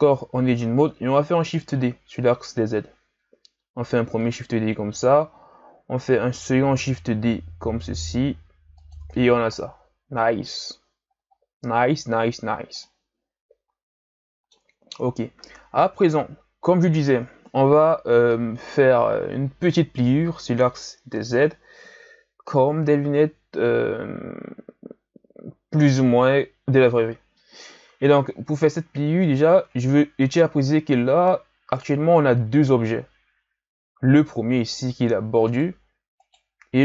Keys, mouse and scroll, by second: 1.3 shift+d, 6.2 shift+d, 9.0 Tab, 9.3 a, 9.5-10.2 scroll down 2, 10.2-11.1 scroll down 10, 11.1-11.8 scroll up 6, 11.8-12.8 scroll down 3, 12.8-14.9 middle drag, 14.9-18.1 scroll up 4, 29.2 right click, 31.1-33.6 scroll down 1, 33.6 g, 36.2 right click.